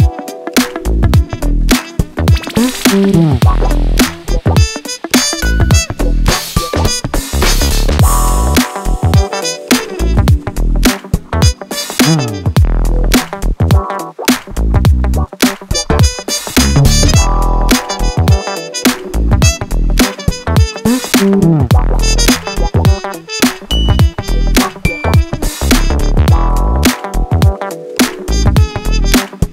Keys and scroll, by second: 0.9 4, 2.1 1, 3.5 ', 7.9 4, 13.7 1, 28.3 4.